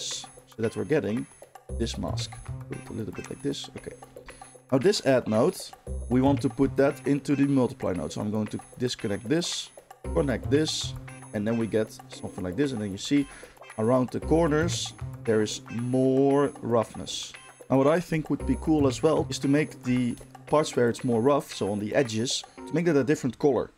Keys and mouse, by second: 3.2-4.8 middle drag, 4.8-5.5 drag, 5.5 middle click, 5.8-11.2 drag, 11.2-22.4 shift+middle drag.